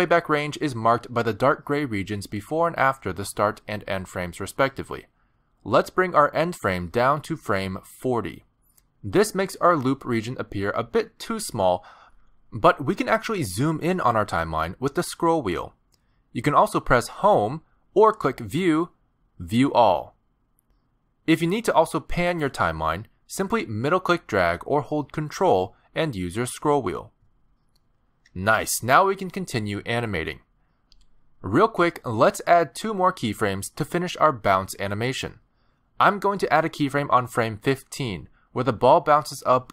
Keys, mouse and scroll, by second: 2.6-5.8 scroll down 3, 7.2 click, 14.8-15.6 scroll up 1, 15.6-17.5 scroll up 7, 17.5 scroll down 2, 18.5 Home, 20.4 click, 23.1 middle click, 26.3-27.0 ctrl+scroll down 5, 27.0 ctrl+scroll up 4, 27.6-29.5 scroll down 17, 30.6-31.5 ctrl+scroll up 1, 32.3-32.6 ctrl+scroll down 1, 39.4-39.7 alt+scroll up 8.